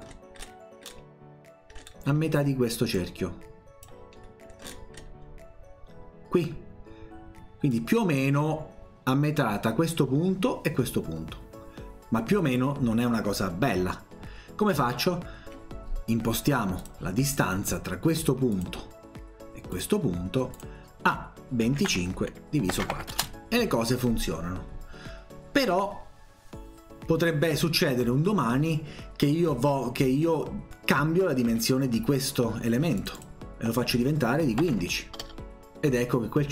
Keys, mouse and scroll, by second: 0.1-0.9 scroll down 4, 1.8 middle click, 2.1 scroll up 1, 3.0 click, 4.2-4.6 scroll up 1, 5.0 scroll down 1, 7.7-12.4 drag, 16.8 click, 18.5 click, 19.7 click, 20.5 click, 21.5-23.5 typing, 31.5 Escape, 33.0 click, 33.2 click.